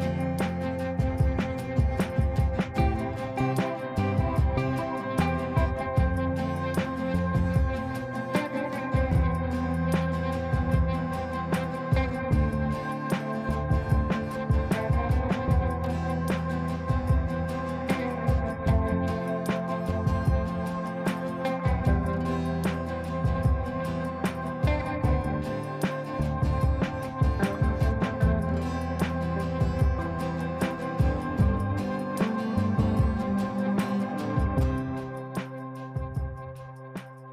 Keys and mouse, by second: 0.7 ctrl+right click, 1.4 click, 1.6 click, 2.6 ctrl+a, 5.7 typing, 9.0 typing, 9.2 ctrl+space, 11.0 click, 13.2 typing, 17.5-19.0 drag, 24.2 click, 25.7 shift+click, 26.3 c, 27.7 click, 32.7-34.3 drag.